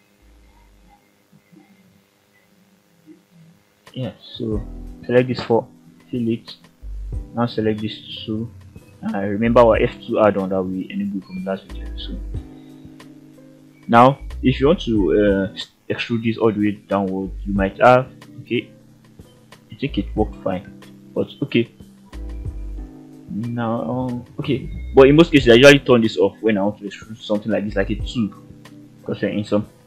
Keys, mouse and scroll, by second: 0.7 click, 1.6 shift+click, 2.0-2.5 scroll down 2, 2.5 middle click, 3.3 ctrl+z, 3.8 shift+click, 4.5 middle click, 6.0 f, 7.0 f, 7.7 middle click, 8.6 f, 8.8-9.2 scroll down 1, 9.2 middle click, 10.4 click, 10.6 click, 11.1 scroll down 1, 11.5 KP_3, 12.0-12.3 scroll up 2, 17.2 click, 17.6 middle click, 18.8 ctrl+z, 19.5 scroll down 1, 19.7 KP_3, 20.8-24.6 drag, 25.6 click, 26.3-26.6 shift+middle drag.